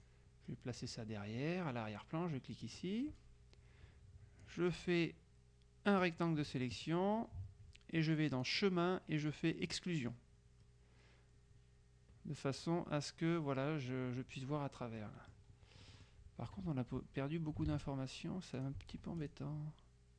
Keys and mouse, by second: 2.7 click, 4.5-6.6 drag, 8.5 click, 9.7 click, 15.1 middle click, 16.1 click, 17.7 ctrl+z, 18.7 click, 19.2 F2, 19.8 click.